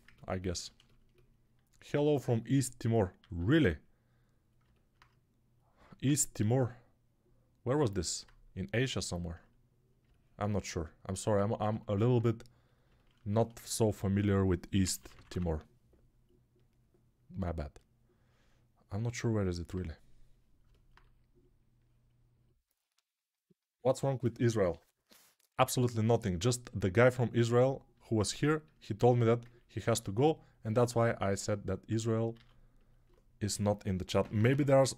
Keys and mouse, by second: 3.1 alt+q, 4.0-12.7 drag, 12.7-20.5 ctrl+alt+right drag, 14.7 [, 14.9 [, 15.0 [, 15.2 [, 20.5-28.3 alt+drag, 29.0 alt+q, 32.3 alt+q, 33.0-34.9 drag, 33.3 1, 34.1 [, 34.2 [, 34.4 [.